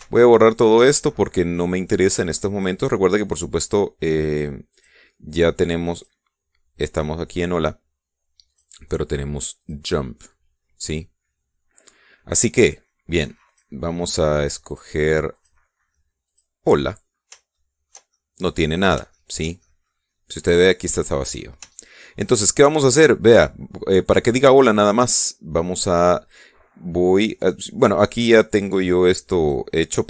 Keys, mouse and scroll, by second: 0.7 x, 1.7 click, 5.5 click, 6.7 click, 9.3 click, 10.4 click, 14.3 click, 15.4 click, 16.1 click, 17.1 click, 18.3 shift+click, 18.9 shift+click, 19.9 shift+click, 20.4 shift+click, 22.1 middle click, 22.6 shift+click, 29.4 click.